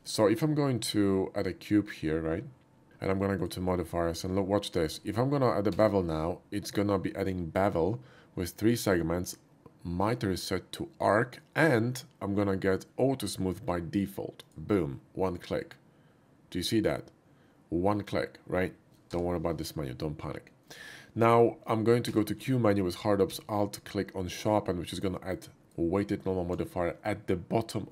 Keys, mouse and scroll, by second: 0.0 shift+a, 3.3 shift+click, 4.8 shift+click, 5.8 q, 14.4 click, 19.2 h, 20.6 click, 22.1 q, 25.5 alt+click.